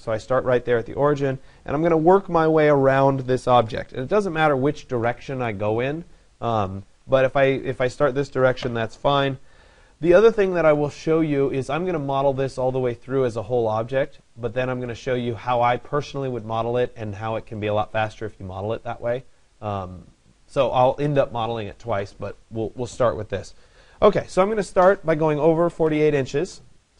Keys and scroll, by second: 25.3 4.